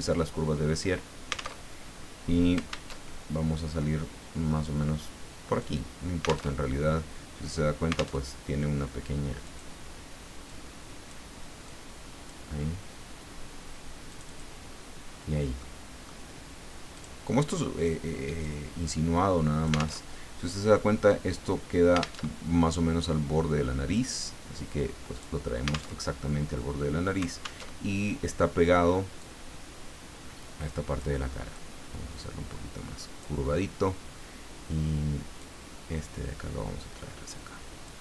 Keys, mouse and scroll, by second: 1.6 alt+Tab, 2.9 alt+Tab, 3.8-4.8 drag, 5.6 click, 6.5 alt+Tab, 8.2 alt+Tab, 9.4-12.3 drag, 14.1 click, 15.6 middle click, 16.9 click, 18.4-20.0 drag, 20.0 alt+Tab, 22.2 alt+Tab, 23.9-25.6 drag, 25.9 alt+Tab, 27.6 alt+Tab, 29.2-31.2 drag, 31.5-33.5 drag, 35.4-38.0 drag.